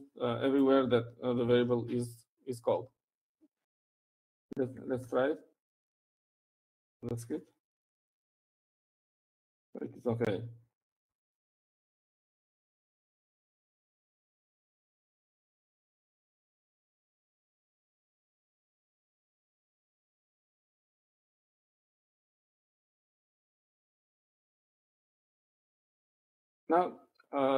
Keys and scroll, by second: 5.6-9.6 typing, 11.9-14.0 typing.